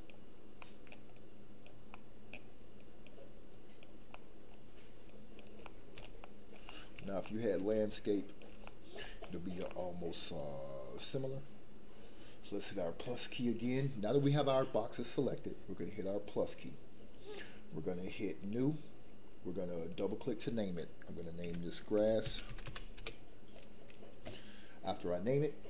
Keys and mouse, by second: 0.6 shift+middle click, 1.1 shift+click, 1.9 shift+middle click, 2.9 shift+click, 3.5 shift+click, 4.1 shift+middle click, 5.2 shift+click, 5.5 middle click, 6.2 shift+middle click, 6.7 middle click, 7.2 shift+middle click, 8.2 shift+click, 8.6 middle click, 9.2 shift+middle click, 9.7-11.0 middle drag, 20.0 click, 23.0 s.